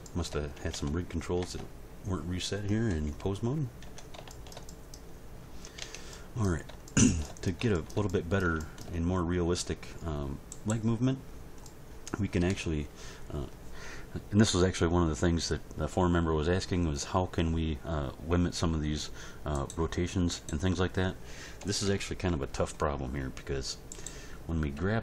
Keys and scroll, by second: 0.7 Tab, 2.9 End, 3.4 Page_Down, 3.9 Tab, 5.8 Tab, 21.6 End, 21.8 Page_Down, 24.7 g.